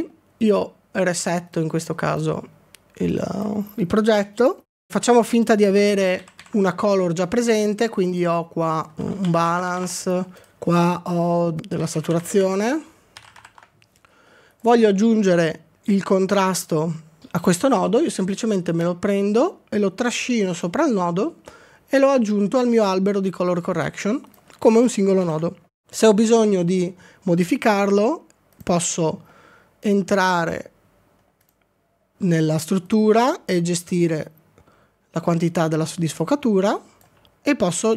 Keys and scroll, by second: 24.8 ctrl+d, 25.2 ctrl+d.